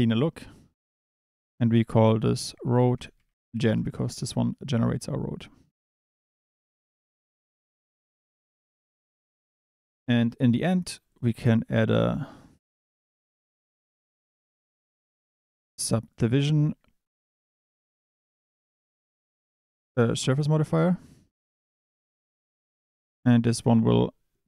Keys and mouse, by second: 1.4-3.7 drag, 11.7 shift+a.